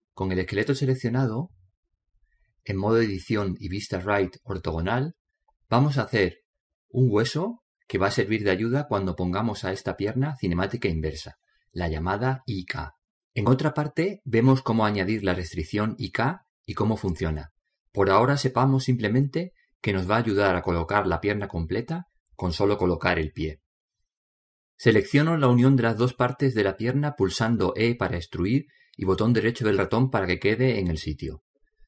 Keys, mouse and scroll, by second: 4.3 KP_3, 5.4-6.8 middle drag, 7.3-9.1 middle drag, 8.0-9.0 scroll up 1, 9.0 scroll up 1, 20.3-20.9 scroll down 1, 20.9-22.4 middle drag, 22.4-22.9 scroll up 2, 22.5 middle click, 22.9 middle click, 26.4 right click, 29.4 e.